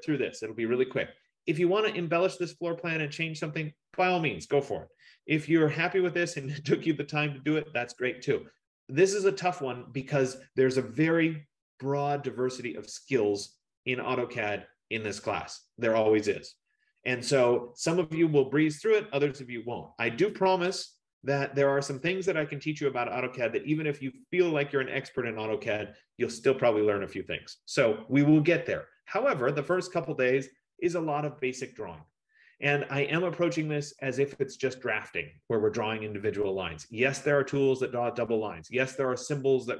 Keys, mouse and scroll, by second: 38.4 F15.